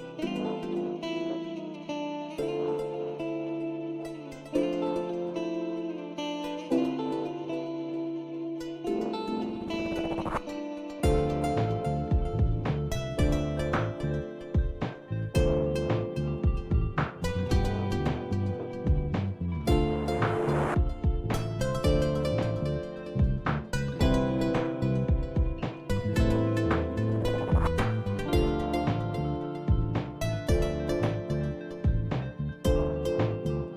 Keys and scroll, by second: 4.9 Tab, 15.2 Return, 21.9 typing, 26.1-29.6 typing, 31.6-33.7 typing.